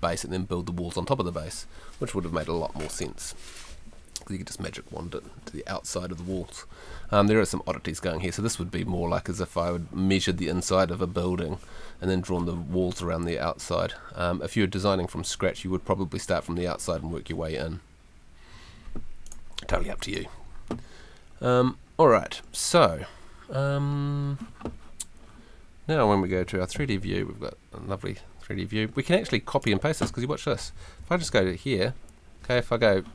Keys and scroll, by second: 26.7 F3, 31.2 F2.